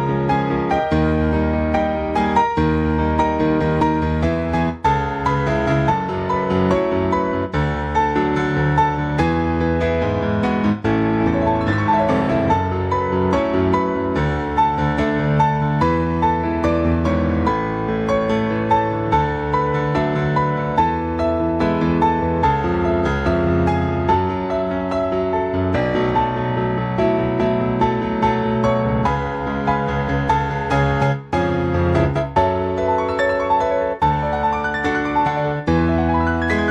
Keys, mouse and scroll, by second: 21.1 click, 22.0 click, 23.1 ctrl+c, 23.3 ctrl+c, 24.6 shift+middle click, 24.9-25.3 scroll up 3, 25.4 shift+middle click, 26.1 click, 27.4 ctrl+v, 29.9 click, 31.3 click, 31.8-32.3 scroll down 2, 32.5 shift+middle click, 33.6 click, 35.6 click.